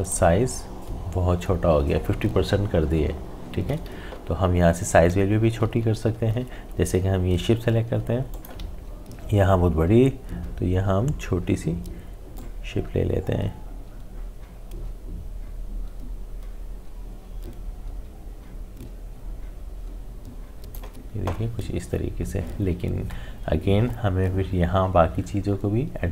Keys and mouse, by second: 6.0 click, 6.3 ctrl+z, 8.3 alt+click, 12.3-22.4 drag.